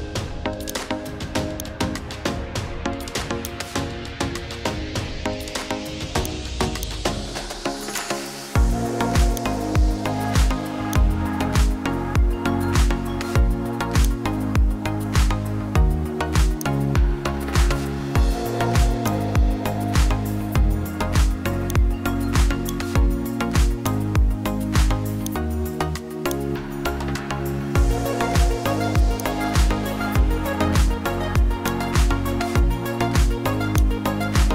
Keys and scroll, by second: 27.1 Down, 27.5 Down, 28.0 Up.